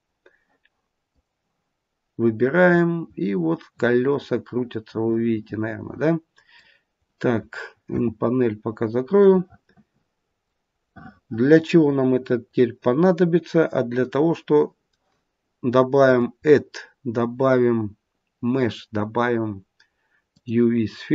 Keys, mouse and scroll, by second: 1.0 click, 2.2 click, 7.8 n, 9.1 middle click, 10.8 middle click, 11.0 middle click, 14.0 middle click, 15.9 click.